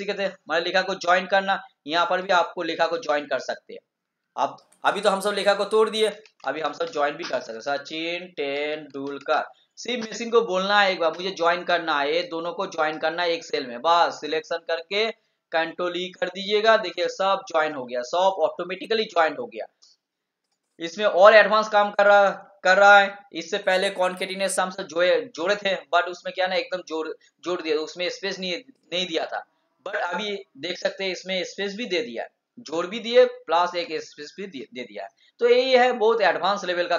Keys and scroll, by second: 16.9 ctrl+e.